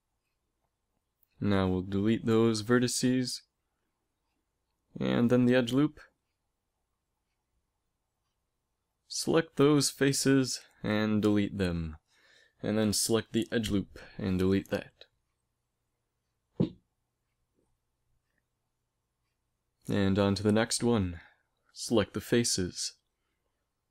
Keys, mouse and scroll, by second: 2.3 x, 2.9 click, 4.2-5.9 right drag, 4.4 x, 6.0 middle click, 6.8 middle click, 7.4 ctrl+Tab, 9.4 right click, 9.9-11.7 right drag, 10.8 x, 11.7 click, 12.8 ctrl+Tab, 13.8 click, 14.3 x, 15.2 click, 15.5 middle click, 16.8 z, 17.7 z, 18.7 a, 20.9 ctrl+Tab, 23.0 right click.